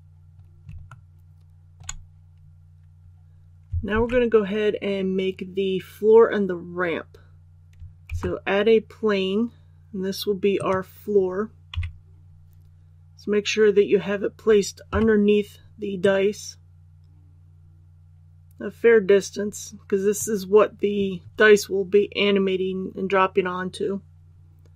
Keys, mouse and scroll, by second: 0.8 shift+middle click, 3.9 alt+a, 8.0 shift+a, 10.5 click, 11.7 KP_1, 14.9 KP_5, 16.0-21.0 drag.